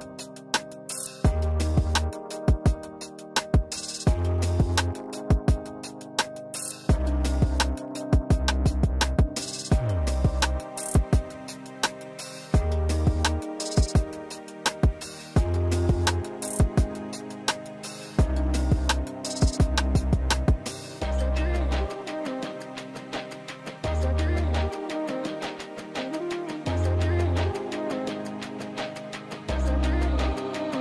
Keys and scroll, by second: 12.7 ctrl+alt+space, 21.0 ctrl+s, 28.5 shift+a.